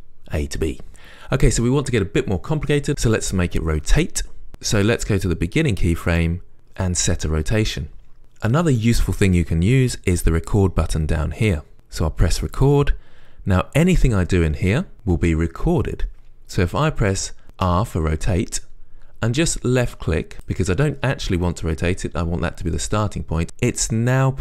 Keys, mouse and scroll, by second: 4.5 right click, 14.5-18.0 right drag, 18.0 r.